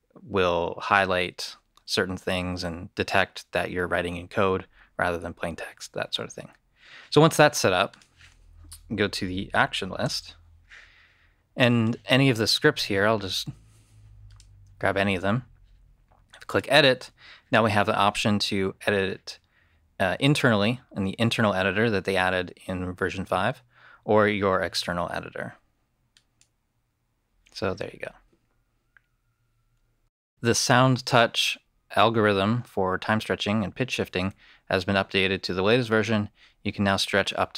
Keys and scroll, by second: 10.1 shift+/.